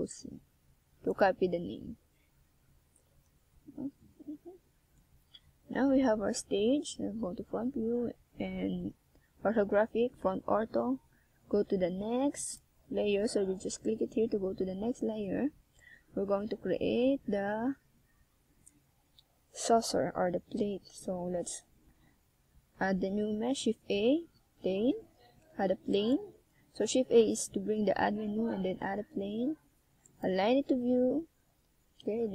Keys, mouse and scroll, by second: 0.4 right click, 3.3 shift+s, 8.1-9.1 scroll up 5, 9.6-10.6 ctrl+scroll down 1, 13.6 e, 15.4 click, 17.4 click, 19.1 scroll up 1, 20.0 g, 21.3 click, 21.9 e, 25.9 click, 29.1 e, 31.3 click, 31.4 e.